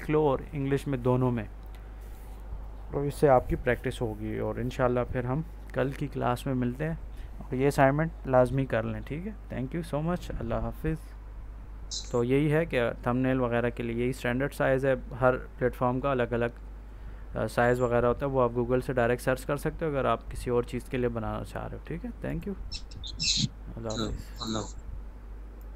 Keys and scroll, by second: 12.0 F9.